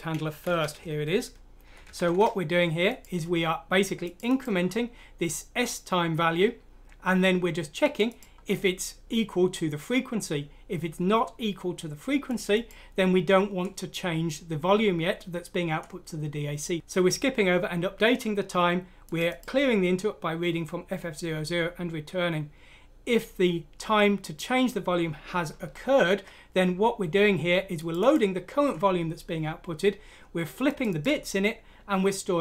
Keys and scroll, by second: 0.4 Home, 1.2 typing, 3.0 typing.